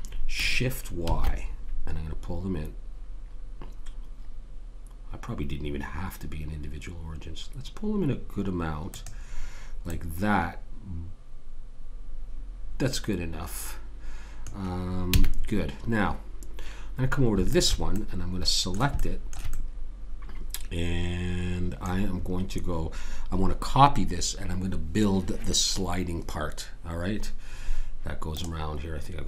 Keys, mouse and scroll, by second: 9.9-11.7 middle drag, 15.1 a, 17.5 click, 19.6-21.3 middle drag.